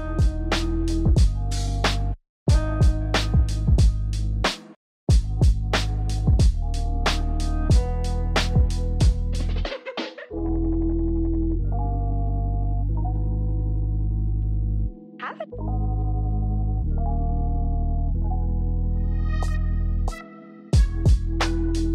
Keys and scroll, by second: 0.0-2.3 typing, 2.4 ctrl+t, 2.6 ctrl+j, 3.1 ctrl+t, 4.0 w, 4.4 v, 6.9-8.5 typing, 9.3 Down, 9.4 Up, 10.1 ctrl+z, 10.1 x, 11.5-13.4 typing, 14.7 ctrl+j, 14.8 ctrl+t, 15.5-17.7 typing, 15.9 ctrl+d, 19.2 ctrl+j, 19.3 ctrl+t, 19.4-20.5 typing, 20.6 ctrl+z.